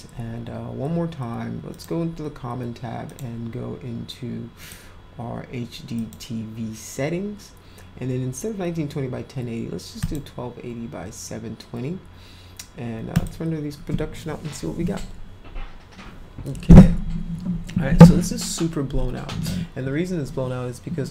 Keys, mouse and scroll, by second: 1.7 click, 3.0 click, 4.6 click, 5.9 click, 10.0 click, 13.1 click.